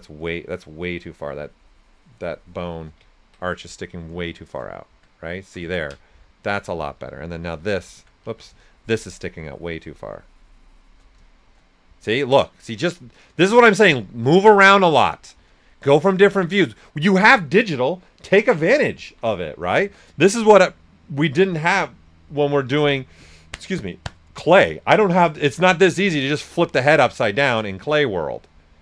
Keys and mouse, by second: 0.6-3.1 shift+drag, 2.7-3.4 typing, 3.1 ctrl+right click, 5.3 alt+right click, 6.4-7.2 typing, 7.3 alt+click, 8.2 ctrl+z, 8.6-11.1 shift+drag, 11.1 right click, 12.1 ctrl+click, 12.6 alt+right click, 19.0 typing, 22.8 m, 24.0 click, 25.3 typing, 25.4 click, 26.2 alt+right click, 26.7 s, 26.8 click.